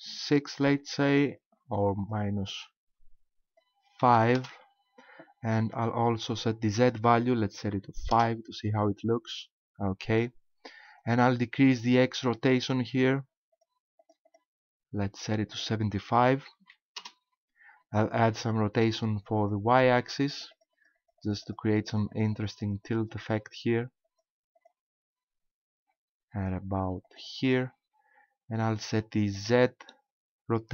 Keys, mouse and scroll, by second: 2.0 click, 6.8 click, 12.3 click, 13.5 click, 14.0 click, 14.4 click, 15.5 click, 19.4 click, 19.9 click, 20.3 click, 20.5 click, 20.7 click, 20.9 click, 21.3 click, 21.5 click, 21.7 click, 21.9 click, 22.1 click, 22.3 click, 22.7 click, 22.9 click, 23.1 click, 24.1 click, 24.6 click, 26.5 click, 27.1 click, 29.3 click.